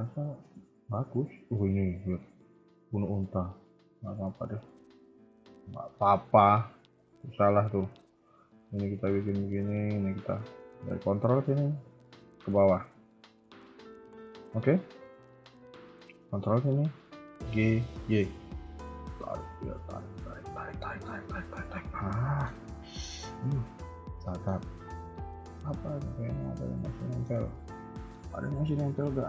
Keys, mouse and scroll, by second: 1.2 middle click, 1.9 middle click, 2.9 middle click, 4.7 middle click, 5.2 Tab, 5.2 scroll up 1, 5.7 middle click, 7.1 click, 7.7 middle click, 8.5 click, 9.9 ctrl+click, 10.5 a, 10.7 a, 11.0 click, 12.3 ctrl+click, 12.5 KP_3, 13.2 shift+middle click, 13.6 scroll up 1, 14.0 shift+middle click, 16.2 ctrl+click, 17.4 g, 22.0 middle click, 22.6 Tab, 22.7 middle click, 24.5 Tab, 24.9 shift+middle click, 25.2 middle click, 27.2 KP_3, 27.8 shift+middle click, 28.1-28.6 scroll up 5, 28.7 shift+middle click.